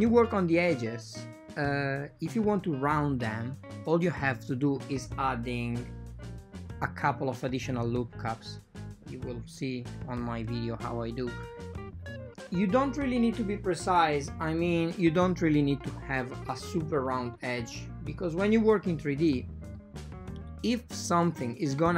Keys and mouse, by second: 0.0 x, 5.7 ctrl+r, 7.9 ctrl+r, 10.7 ctrl+r, 13.0 ctrl+r, 16.4 ctrl+r, 18.0 ctrl+r, 20.9 ctrl+r.